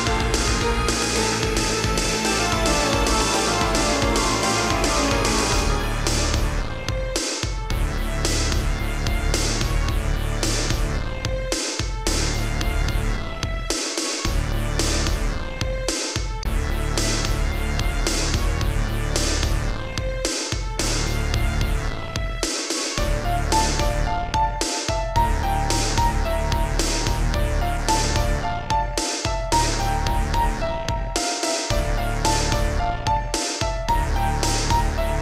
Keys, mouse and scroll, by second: 0.0-0.3 typing, 1.0 click, 2.6 shift+click, 3.7 g, 4.2 z, 5.9 click, 6.0 click, 6.7 Right, 7.3 Right, 9.3 Right, 10.0 Right, 10.2 Left, 10.8 Right, 11.0 Right, 13.0 Left, 13.2 Left, 15.5 Left, 16.6 g, 17.1 z, 18.4 Escape, 20.5 Right, 22.5 Right, 24.3-24.8 typing, 26.6 click, 26.7 click, 27.5 Right, 29.8 Left, 29.9 Left, 30.4 Right, 30.7 Right, 30.9 Right, 31.8 Left, 32.0 Left, 32.2 Left, 32.6 Right, 33.8-34.3 typing.